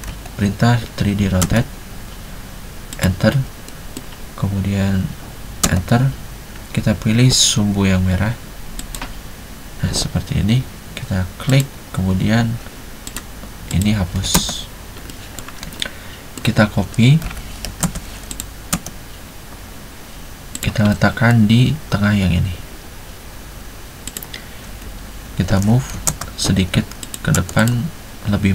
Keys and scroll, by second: 0.0-0.1 typing, 1.6 space, 5.8 space, 14.4 space, 17.3-18.8 typing, 25.3 Escape, 26.0 typing, 27.4 space.